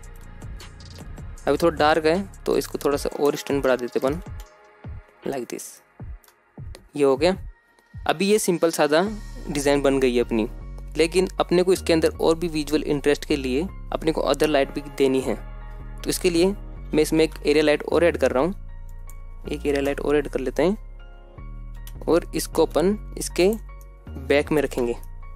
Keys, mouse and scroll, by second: 0.3-0.7 shift+middle drag, 0.8-1.2 scroll up 1, 3.0-6.0 drag, 4.0 KP_0, 6.3-6.8 shift+middle drag, 7.0 scroll up 1, 9.3-10.3 scroll up 2, 13.8 shift+middle click, 13.8 scroll down 2, 16.1 shift+a, 17.9 scroll up 2, 18.7 g, 19.1 z, 20.0 click, 20.5 KP_0, 22.1 g, 22.8 x, 23.5-24.4 drag, 23.8 middle click, 24.5 shift+middle click, 24.8 g, 25.3 click, 25.3 r.